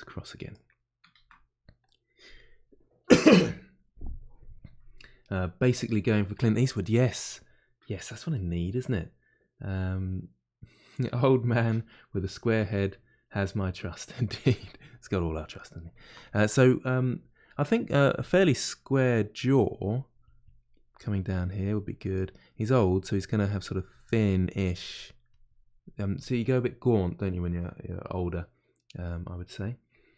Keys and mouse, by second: 17.9 f, 19.5-20.6 drag, 20.6 middle click, 21.4 click, 22.3 middle click, 22.7-28.6 drag, 28.6-30.1 middle drag.